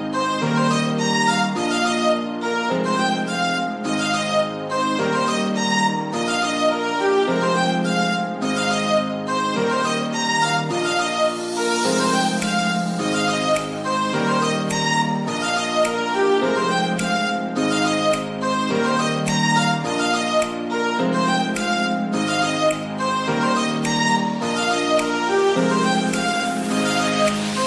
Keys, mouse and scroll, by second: 0.2 a, 1.1 s, 1.9 s, 3.3 g, 4.3 g, 5.8 middle click, 6.5 s, 7.9-9.2 middle drag, 9.2 s, 9.9 middle click, 10.3 g, 12.7 Tab, 13.1 middle click, 13.5-13.8 scroll up 3, 13.8 shift+middle click, 14.6-15.4 scroll up 2, 15.4-15.9 scroll up 1, 15.9 shift+d, 17.7-18.6 middle drag, 18.6 Tab, 19.0 s, 20.2 scroll down 2, 20.6 Tab, 21.0-22.9 middle drag, 23.7 shift+d, 25.2 g, 26.9 Tab, 27.2 middle click.